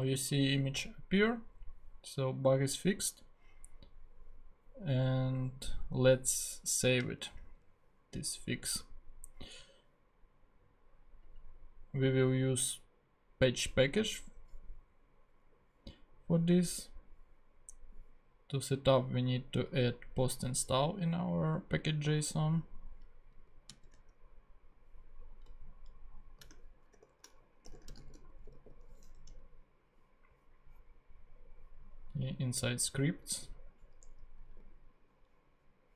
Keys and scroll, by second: 7.2 super+Tab, 23.7 super+c, 23.9 super+Tab, 26.9 shift+super+o, 27.5-29.0 typing, 29.3 Return, 34.0 Return, 34.5 super+v.